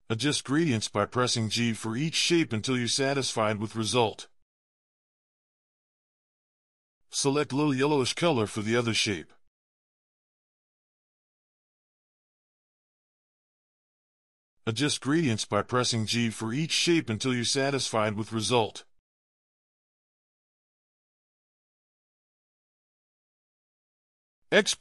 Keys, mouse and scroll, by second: 1.3 g, 5.3 ctrl+click, 19.5 ctrl+click, 19.7 ctrl+click, 20.8 ctrl+click, 20.9 ctrl+click, 22.5 ctrl+click, 22.6 alt+scroll down 2, 22.7-23.4 scroll up 2, 22.8 v, 23.9-24.8 alt+scroll down 4.